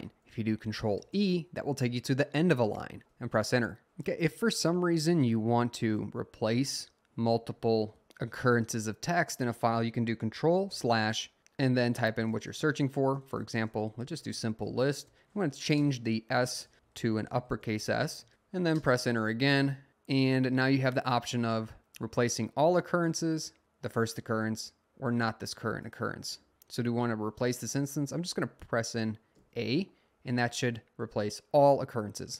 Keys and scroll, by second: 1.0 e, 3.1 Return, 3.8 Down, 4.5 Down, 4.7 Down, 5.5-6.5 Up, 7.2 Up, 7.4 Up, 7.6 Up, 10.8 \, 12.0-18.8 typing, 15.8 Return, 29.3 a.